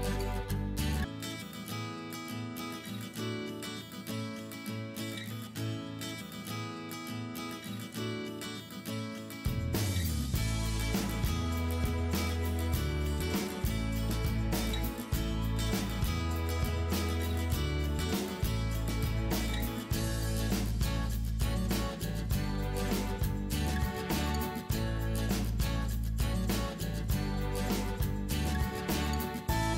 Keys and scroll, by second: 1.6 Return, 2.9 Up, 4.5 Up, 6.3 Return, 6.8 Up, 6.8 Up, 6.8 Up, 7.3 Return, 9.2-10.3 typing, 11.5-12.9 typing, 13.4 Down, 13.5 Down, 14.3 Return, 14.3 Return, 16.8-18.8 typing, 19.6 Return, 21.2 Up, 21.9-22.5 Up, 26.2 Return, 26.7 ctrl+s, 27.3 Up.